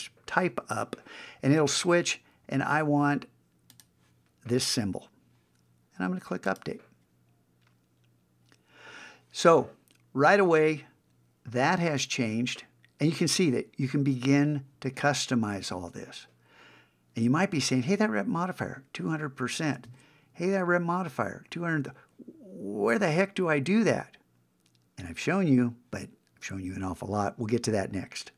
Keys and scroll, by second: 19.9 super+Tab.